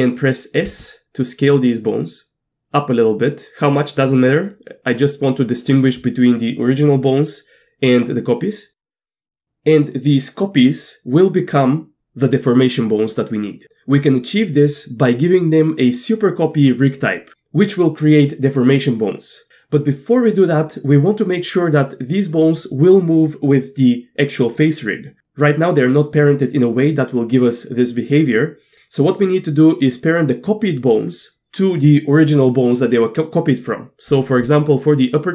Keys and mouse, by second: 0.8 s, 4.4 click, 8.9 middle click, 9.2 middle click.